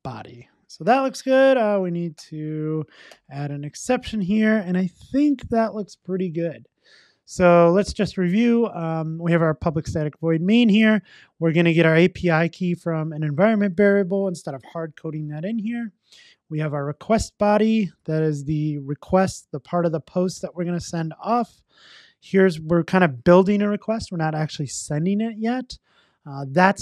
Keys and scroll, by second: 2.3 alt+Return, 3.9 super+s.